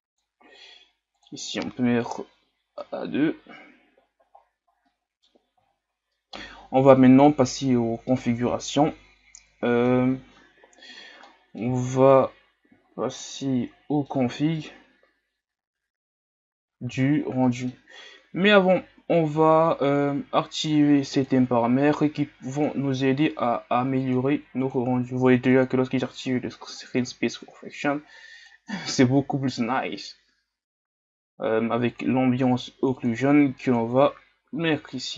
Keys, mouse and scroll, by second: 5.0 middle click, 5.6-6.1 scroll up 4, 6.1-11.0 middle drag, 11.0 scroll down 2, 11.3-11.8 middle drag, 11.8-12.2 scroll down 1, 12.2-12.9 scroll up 4, 12.9-13.3 scroll down 6, 13.3-16.4 middle drag, 16.4-17.0 scroll down 5, 17.0 shift+scroll up 3, 17.4-17.8 middle drag, 17.8 scroll up 1, 21.3-35.1 drag.